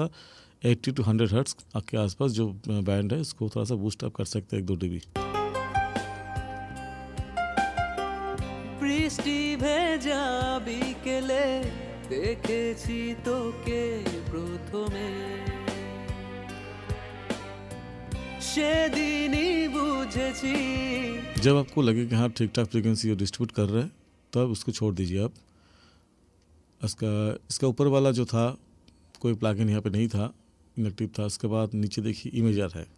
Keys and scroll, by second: 5.1 space, 21.4 space.